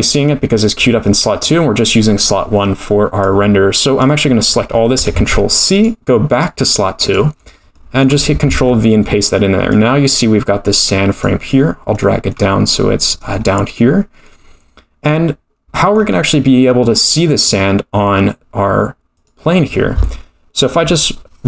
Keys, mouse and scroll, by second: 3.2 click, 5.1 ctrl+c, 5.7-7.3 drag, 7.3-7.7 scroll down 7, 7.7 middle click, 8.5 ctrl+v, 9.7-11.5 drag, 11.9 middle click, 13.2-15.1 middle drag, 15.1-15.7 scroll up 2, 15.7-16.1 middle drag, 15.7-16.1 scroll up 3, 19.1 click.